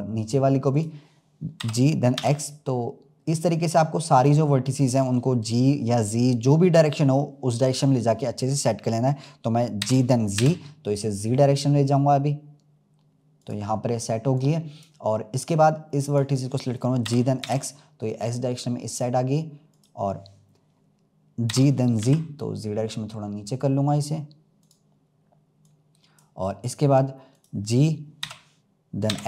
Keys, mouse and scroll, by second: 1.5 g, 9.7 g, 14.3-16.4 drag, 17.0 g, 21.4 g, 25.6-27.3 drag.